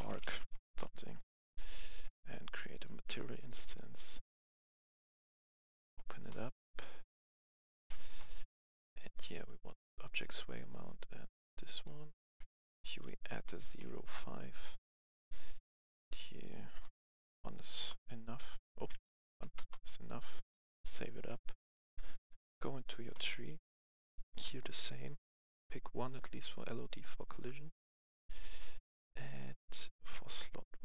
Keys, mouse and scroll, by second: 0.0-0.4 typing, 0.6 Return, 1.6 click, 1.9 right click, 2.7 click, 7.0-8.0 drag, 12.4-13.8 typing, 15.1 click, 15.9 typing, 17.1 KP_0, 17.7 Return, 19.3 KP_1, 19.6 Return, 20.4 click, 23.3-24.4 scroll down 1, 24.9-26.0 drag, 27.2 click, 27.5-28.4 scroll up 1, 29.2 click, 30.5-30.8 scroll down 1.